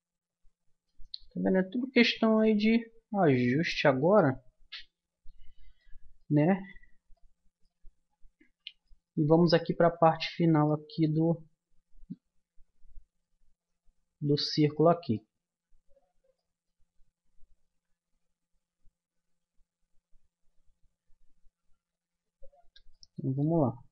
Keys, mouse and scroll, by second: 1.8-3.6 middle drag, 5.8-7.2 middle drag, 7.5 middle click, 11.3 Tab, 12.0 Tab, 13.4 middle click, 14.8 middle click, 17.7 a, 19.6 middle click, 22.2 z.